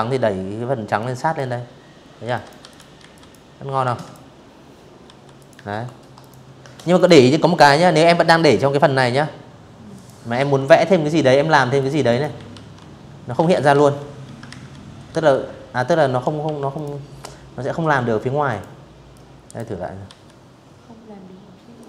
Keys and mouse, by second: 0.0-1.5 typing, 0.0 click, 1.6 click, 2.7 v, 3.0 click, 3.9 click, 4.6 click, 6.1 click, 7.6 click, 8.0 v, 9.4 drag, 9.7 click, 9.8-12.8 typing, 12.1 ctrl+z, 13.4 click, 14.1 Delete, 14.4 click, 16.2 click, 16.8 click, 17.7 v, 19.4 click, 20.5 click, 21.4 click.